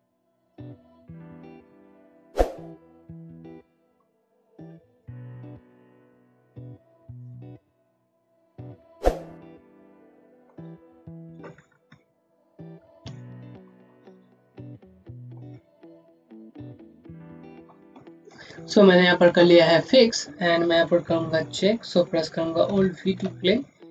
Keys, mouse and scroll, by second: 0.2 click, 2.1 click, 2.3 Down, 2.7 Right, 3.4 click, 4.2 alt+Right, 5.4 click, 6.0 Right, 6.3 Down, 7.0 click, 7.6 Right, 8.4 Up, 8.7 Left, 9.6 click, 9.9 shift+click, 10.4 right click, 10.8 click, 11.4 scroll down 1, 12.3 alt+v, 17.4 v, 17.5 click, 19.4 scroll down 1, 22.6-23.0 scroll down 1, 23.0 v.